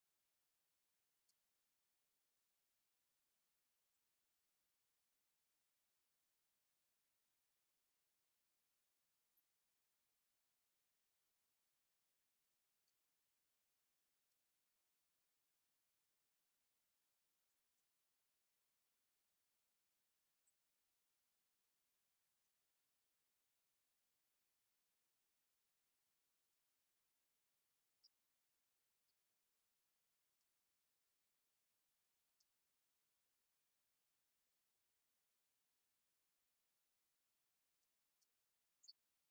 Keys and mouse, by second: 0.3 click, 2.1 click, 3.4-7.0 drag, 27.8-29.5 drag, 32.3-39.3 drag.